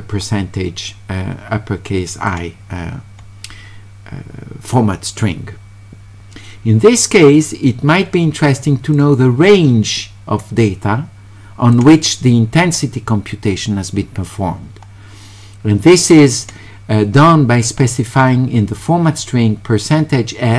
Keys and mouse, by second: 0.9-2.3 drag, 8.9-11.7 drag, 16.3 click.